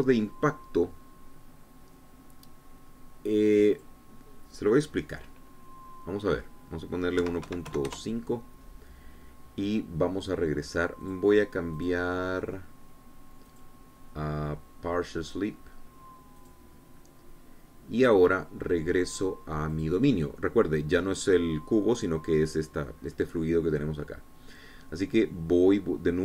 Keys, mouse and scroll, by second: 4.6 click, 8.0 KP_1, 8.3 KP_Decimal, 8.5 KP_5, 8.7 KP_Enter, 11.8 click, 12.6 click, 14.3 click, 17.2 click, 20.5 click, 21.9-23.1 scroll down 2, 23.1 scroll down 1, 25.5-26.2 scroll down 2.